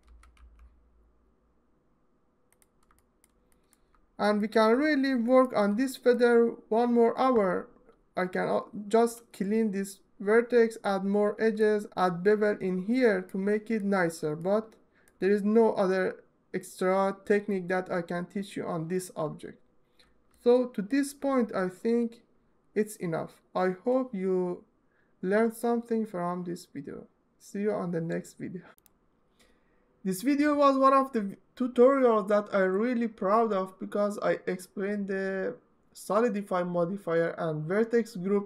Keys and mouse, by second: 0.0 y, 2.2 click, 4.0-4.4 middle drag, 4.5 Tab, 5.1 middle drag, 5.6 middle drag, 11.3 middle click, 13.1-13.5 alt+middle drag, 14.1-14.8 alt+middle drag, 20.1-20.6 alt+middle drag, 21.4 Tab, 28.5 Tab.